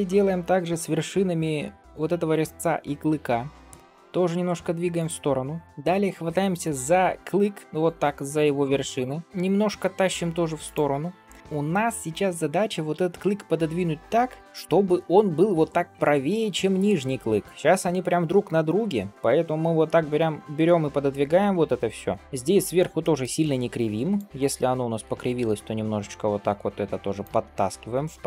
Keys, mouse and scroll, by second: 5.6 click, 7.5 shift+click, 7.7 shift+click, 8.9 middle click, 9.2 g, 14.4 middle click, 18.3 g, 22.2 middle click, 22.2 click, 22.9 shift+middle click, 24.0 shift+click, 24.6 middle click, 25.2 g, 27.7 middle click, 28.2 shift+middle click.